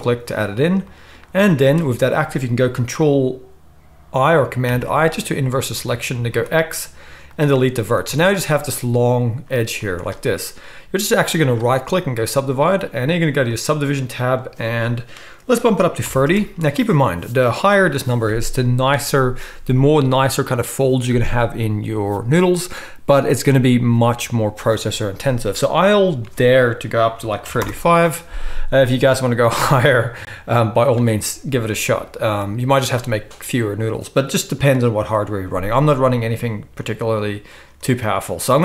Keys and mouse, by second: 1.3 z, 4.7 ctrl+i, 6.3 x, 8.1 a, 11.4-13.4 right drag, 13.6-27.5 drag, 13.6-27.5 middle drag, 13.6-27.5 right drag.